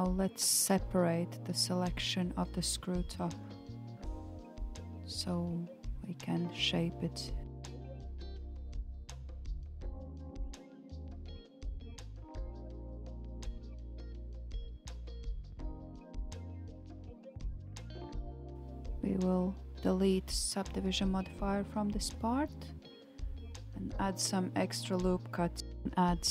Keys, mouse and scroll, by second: 4.8 p, 10.9 alt+z, 12.4 Tab, 13.2 click, 15.1-18.2 drag, 18.5 Tab, 18.7-19.8 right drag, 19.8-20.1 scroll up 1, 20.1-21.6 middle drag, 21.6 m, 23.2 ctrl+r, 25.8-26.3 middle drag.